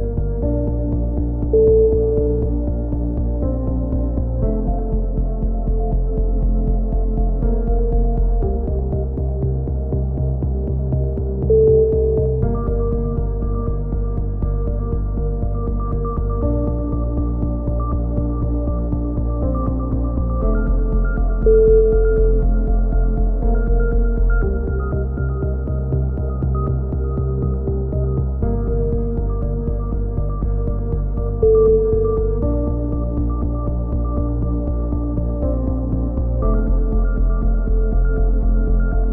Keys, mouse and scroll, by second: 1.3 a, 1.8-3.3 right drag, 2.7 g, 8.0 middle click, 8.6 a, 9.6-12.1 right drag, 11.6 x, 12.7 ctrl+r, 14.3 a, 14.5 middle click, 14.7 click, 17.2-18.3 middle drag, 18.3 ctrl+r, 18.3 click, 18.5-19.8 middle drag, 20.8 a, 21.3-22.6 drag, 22.3 ctrl+r, 23.3 a, 23.7 ctrl+r, 25.3 a, 26.0 ctrl+r, 28.4 ctrl+KP_1, 29.1 a, 29.7-31.6 drag, 31.2 l, 32.8-34.5 middle drag, 33.9 alt+r, 35.1 t, 36.5 click, 38.0 click.